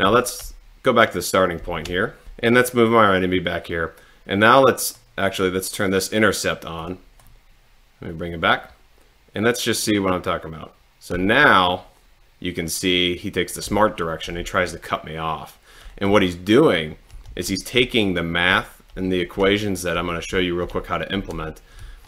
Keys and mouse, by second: 0.2 Left, 1.7 Right, 2.4 Down, 3.2 click, 5.1 click, 7.0 click, 8.1-11.2 drag, 11.2 Down, 13.7 Left, 14.5 Left, 16.2 Up, 17.4 Left, 17.9 Up, 17.9 click, 18.7 Left, 19.4 Right, 20.4 Up, 20.7 Right, 21.9 Down.